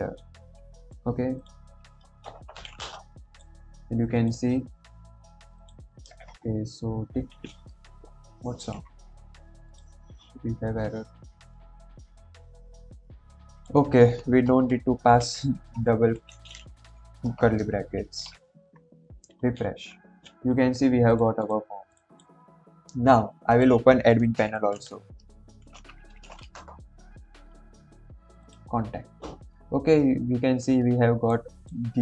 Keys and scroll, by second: 8.5 ctrl+j, 14.6 Right, 14.7 Left, 15.0 Right, 15.5 BackSpace, 16.0 End, 16.2 Left, 16.4 Left, 17.1 BackSpace, 17.6 ctrl+s.